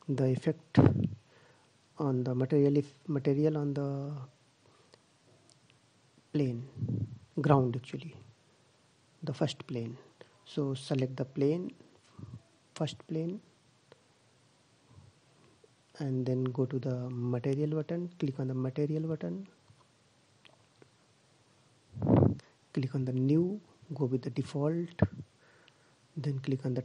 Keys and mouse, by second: 10.2-11.7 right drag, 17.2-19.5 drag, 19.7-21.0 drag, 21.1-22.8 drag, 25.0-26.5 middle drag, 26.7 click.